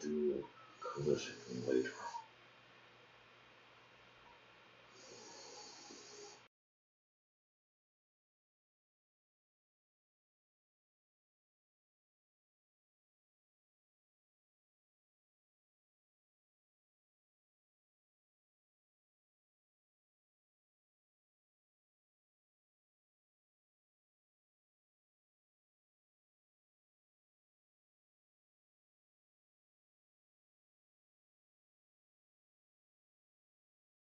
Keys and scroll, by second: 33.3-34.0 typing.